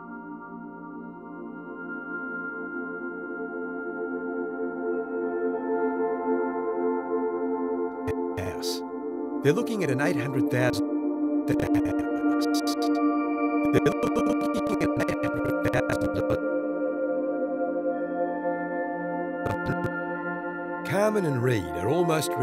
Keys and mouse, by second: 1.6 click, 2.3 i, 2.9-3.9 drag, 4.6 click, 4.6 typing, 5.1 click, 6.5 typing, 7.1 click, 7.8 click, 8.1-8.8 typing, 10.5-11.4 typing, 11.4-16.8 drag, 16.9-18.7 typing, 18.0 click, 19.4 click, 19.8 space.